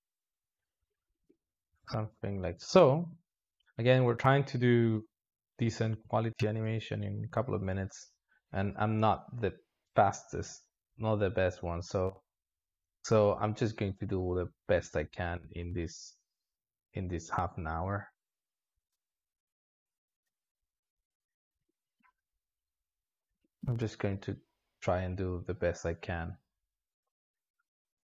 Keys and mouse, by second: 1.1 space, 1.6 alt+shift+z, 2.4 click, 3.4-7.1 drag, 10.6-11.3 drag, 11.3 space, 12.4 alt+shift+z, 21.5 space, 21.9-23.3 drag, 23.3 space, 24.7-27.1 drag.